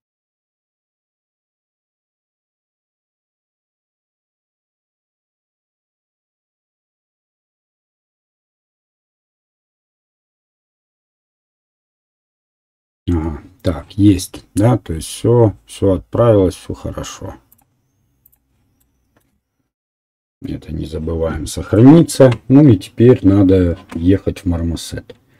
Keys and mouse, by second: 12.9-17.8 right drag, 17.8 middle click, 18.2 right click, 18.7 middle click, 20.6 ctrl+s.